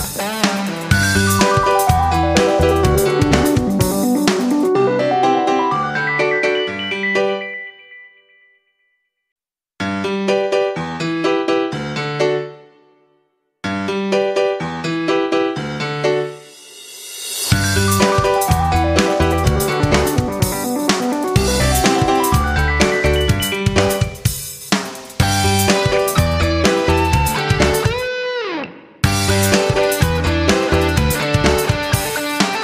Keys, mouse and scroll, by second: 4.1-7.9 drag, 8.4 F9, 10.2 click, 17.0 ctrl+shift+g, 17.8 click, 22.5 ctrl+c, 23.9 click, 25.7 ctrl+v, 26.7 Return, 27.7-32.6 drag.